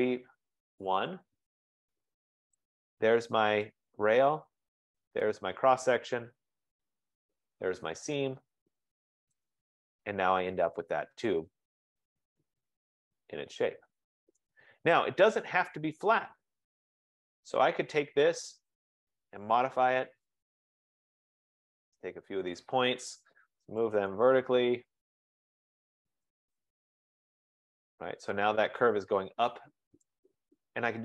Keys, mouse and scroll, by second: 0.0-1.0 typing, 1.7 scroll down 4, 2.9 click, 3.2-3.9 typing, 4.1 scroll, 5.1 click, 6.1 Return, 7.7 Return, 9.6 click, 11.2 F15, 14.6 right click, 15.1 click, 16.4-17.5 typing, 19.0 click, 22.7 click, 23.4-27.6 typing, 25.1 click, 26.5 click, 27.1 click, 30.1 right click, 30.9 scroll.